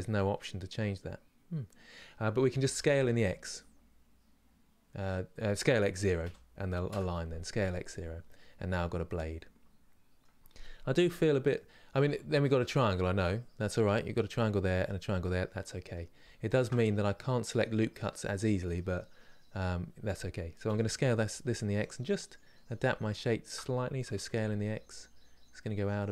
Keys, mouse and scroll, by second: 2.3 s, 7.1-16.2 middle drag, 16.5-20.4 middle drag, 20.4 s, 21.9 middle click, 22.8 alt+click, 23.8 s.